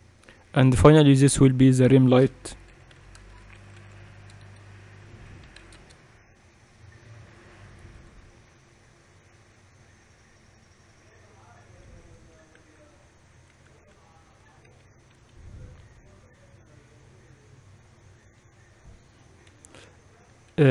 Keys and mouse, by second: 1.9-12.8 drag, 12.8 Escape, 13.4 z, 14.4 s, 15.8 g, 20.1-20.7 typing.